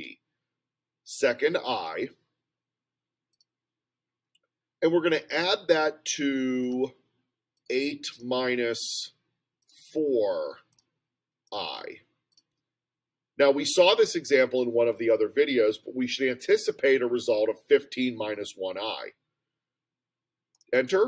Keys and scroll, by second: 1.2 ., 3.3 ), 7.6 8, 8.1 -, 9.6 4, 11.6 ., 12.3 ).